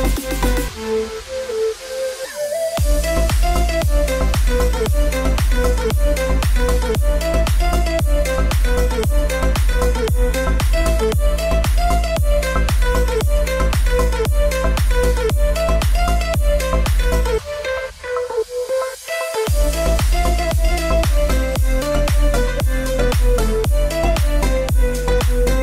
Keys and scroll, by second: 0.0-2.2 typing, 4.1-12.4 typing.